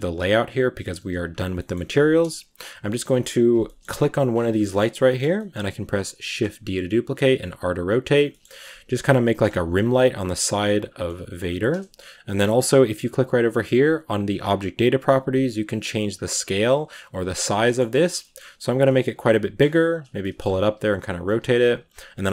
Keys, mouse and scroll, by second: 0.0 click, 0.7-1.2 shift+middle drag, 1.2 z, 1.4-2.9 middle drag, 2.9 KP_Decimal, 3.5 shift+middle drag, 3.7-4.5 scroll down 9, 4.5-5.1 shift+middle drag, 5.1 scroll up 1, 5.2-6.2 middle drag, 6.2 shift+d, 7.3 r, 8.1 shift+middle click, 8.5 r, 9.1-9.4 middle drag, 9.4 g, 9.8 scroll up 4, 10.0 middle click, 10.3 r, 10.9-11.3 middle drag, 11.3 g, 11.7-12.1 scroll down 2, 12.1-15.4 middle drag, 15.4-17.5 drag, 17.5-18.4 middle drag, 18.4-21.8 typing, 19.1-19.5 middle drag, 20.0-20.4 middle drag.